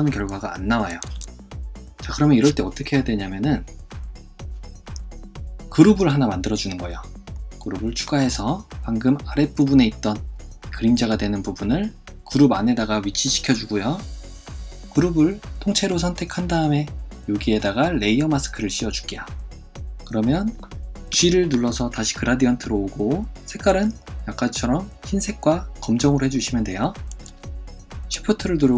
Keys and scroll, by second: 1.1 super+z, 21.1 g.